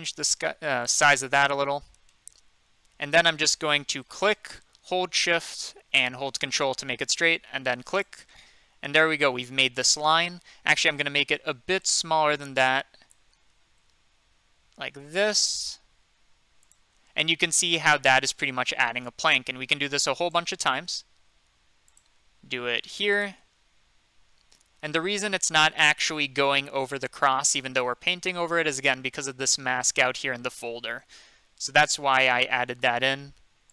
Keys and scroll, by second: 10.9 ctrl+z, 11.5 ctrl+z.